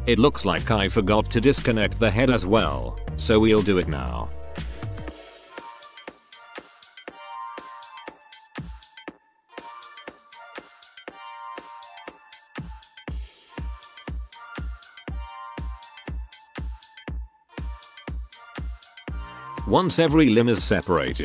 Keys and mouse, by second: 0.3 p, 4.6 z, 5.2 z, 6.2-10.4 middle drag, 7.9 space, 9.3 l, 10.4-12.0 drag, 10.4 l, 10.5 g, 12.6-14.5 middle drag, 14.1 right click, 14.1 f, 14.5 alt+p, 15.2 middle click, 15.2-16.3 right drag, 15.7 f, 15.9 alt+p, 16.6 middle click, 16.9 middle click, 17.4 right click, 17.7 l, 18.1 g, 19.3 z, 19.5 ctrl+KP_1, 20.0 b, 20.9 p.